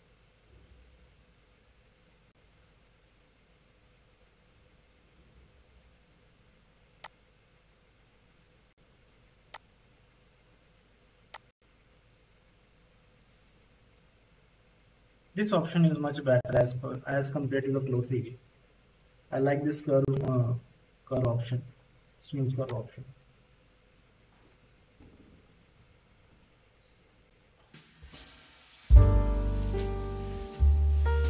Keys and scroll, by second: 27.8 z, 29.2 c, 29.2 v, 30.6 2.